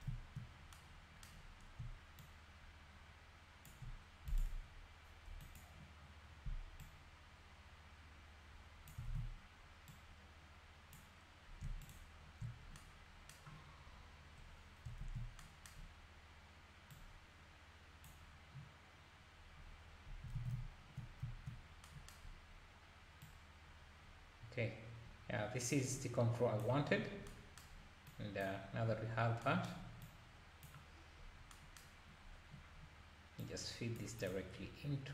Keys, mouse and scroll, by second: 2.2-5.6 shift+drag, 6.8-9.1 drag, 9.1 ctrl+s, 9.9 click, 11.0 click, 12.0 ctrl+shift+click, 13.6 scroll down 3, 14.5-15.0 scroll up 1, 15.0 ctrl+s, 16.9 drag, 20.3 alt+a, 20.5 `, 21.2 `, 22.3 scroll up 2, 23.2-26.2 drag, 27.0 scroll down 2, 28.1 click, 28.7-29.4 scroll down 1, 29.4 scroll down 1, 30.0 click, 31.0-31.5 scroll down 1, 33.4 drag, 34.2 drag, 34.5 scroll down 3.